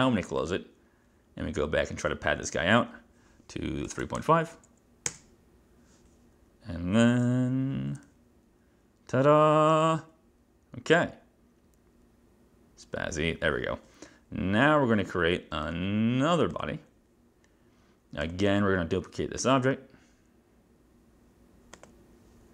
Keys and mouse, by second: 2.1 click, 3.7-4.8 typing, 5.2 Return, 15.7 click, 18.3 click, 19.5 click, 21.8 click.